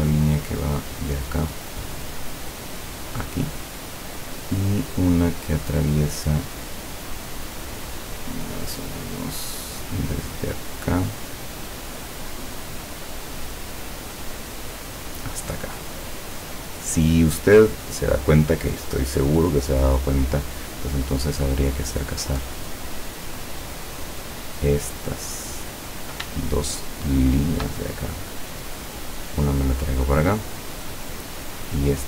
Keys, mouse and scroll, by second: 1.5 click, 3.0 click, 11.4 click, 13.6 click, 14.3-14.9 scroll up 2, 14.9 click, 15.3-16.1 scroll up 2, 16.1 scroll up 1, 22.1 click, 23.4 click, 25.6 click, 26.6 shift+click, 27.4 shift+click, 27.9-30.4 shift+drag, 30.7 click, 31.3 click.